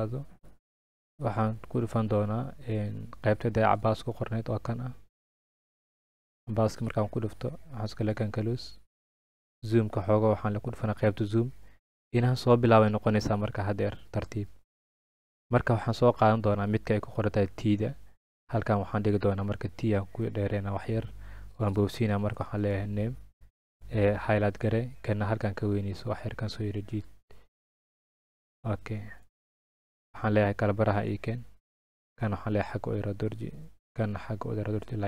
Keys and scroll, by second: 21.8-22.9 typing, 23.6 ctrl+a.